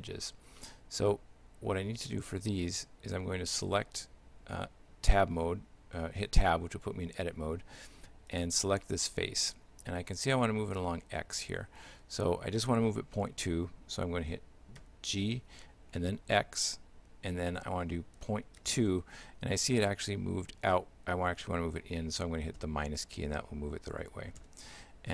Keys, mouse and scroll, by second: 0.6 shift+middle click, 3.8 Tab, 8.3 right click, 14.8 g.